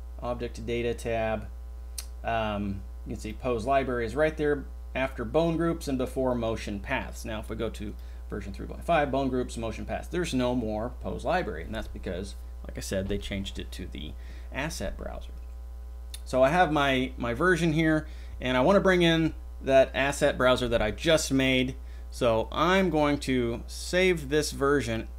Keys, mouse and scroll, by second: 3.2 drag.